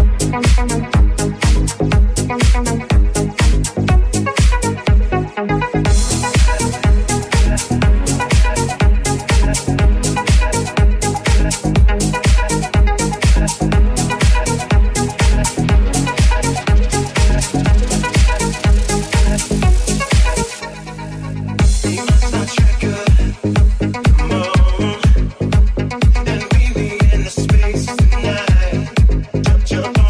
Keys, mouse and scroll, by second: 1.3 i, 1.3 w, 2.5 s, 3.8 alt+e, 5.7-10.5 shift+middle drag, 10.4 1, 10.5 right click, 10.6-14.5 middle drag, 12.0 g, 14.1 alt+z, 14.5 alt+right click, 14.6-15.6 alt+middle drag, 15.6 alt+shift+right click, 15.7 alt+shift+middle click, 16.2 ctrl+z, 16.5 alt+shift+right click, 16.6-19.1 alt+shift+middle drag, 17.9 3, 18.2 alt+z, 18.6 alt+z, 18.9 1, 19.2-28.1 middle drag, 20.1 ctrl+KP_Add, 20.3 alt+z, 21.2 i, 28.1-29.6 middle drag.